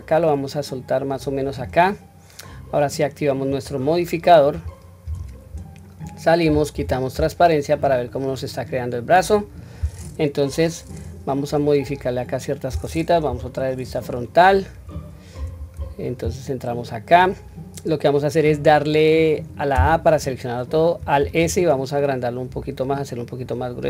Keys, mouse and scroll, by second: 3.5 click, 5.0 Tab, 5.7-6.5 scroll down 1, 6.7 q, 7.1-8.1 middle drag, 8.3-9.3 middle drag, 9.5 scroll up 1, 11.1 scroll down 1, 11.5 scroll up 3, 13.3 KP_1, 14.1 scroll down 1, 14.8-15.4 scroll down 1, 15.4 Tab, 21.2 alt+s.